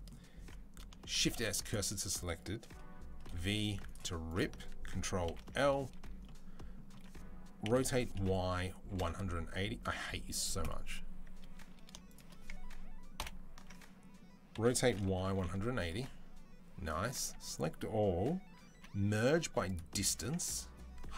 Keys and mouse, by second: 1.0-4.1 shift+middle drag, 1.0 shift+s, 3.1 v, 4.1 click, 4.2-10.5 ctrl+middle drag, 5.1 ctrl+l, 7.5 r, 13.0 ctrl+l, 14.4 r, 17.1 a, 18.6 m, 20.1-21.1 middle drag.